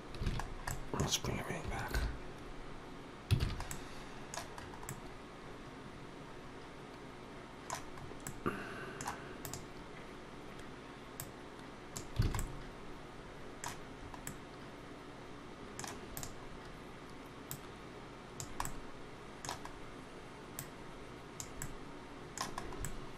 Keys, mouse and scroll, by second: 0.1 alt+a, 0.2 scroll down 2, 0.5 middle click, 1.8 alt+h, 3.2 alt+a, 3.5 middle click, 4.4-5.0 scroll up 3, 4.7 middle click, 7.9 scroll up 1, 8.1 middle click, 9.2 click, 11.0 click, 12.1 alt+a, 12.2 middle click, 13.8 scroll up 2, 14.1 middle click, 15.9 click, 16.3-17.0 scroll down 2, 17.3 click, 18.5 middle click, 19.5 scroll up 1, 20.4 click, 21.4 middle click, 22.3-22.8 scroll up 3, 22.7 middle click.